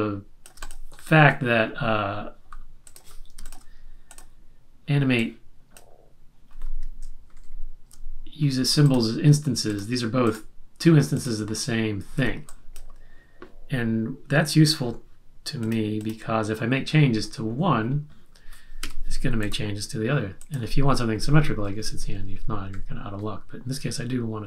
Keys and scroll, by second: 7.2 shift+Right, 7.3 shift+Right, 12.1 z, 18.8 v, 21.6 Right, 21.8 Right, 21.8 Right, 22.0 Right, 22.1-23.1 Right.